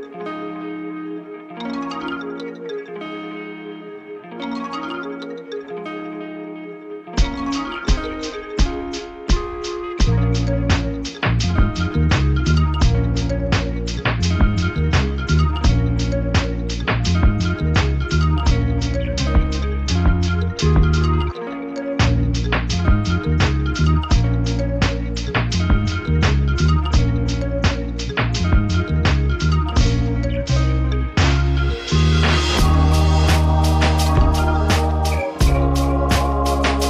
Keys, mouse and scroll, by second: 0.2 space, 2.0-6.3 drag, 8.0 click, 9.1 shift+click, 10.5 shift+click, 12.7 click, 14.2 click, 16.1 click, 17.1 click, 24.3 ctrl+KP_Add, 27.8 click, 29.3 ctrl+d, 30.6 shift+click, 32.5 ctrl+KP_Multiply, 35.6 F7, 36.3 click.